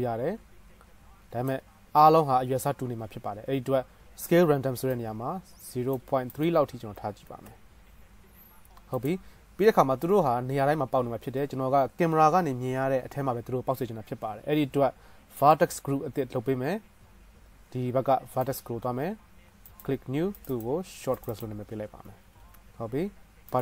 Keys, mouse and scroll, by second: 18.8-20.0 right drag, 20.8-22.3 right drag, 22.5 s.